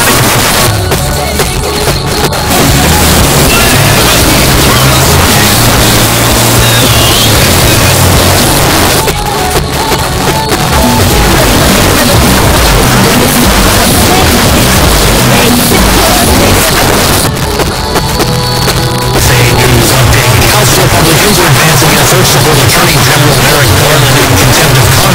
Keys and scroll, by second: 0.2 Page_Down, 8.5 Page_Down, 16.6 Page_Down.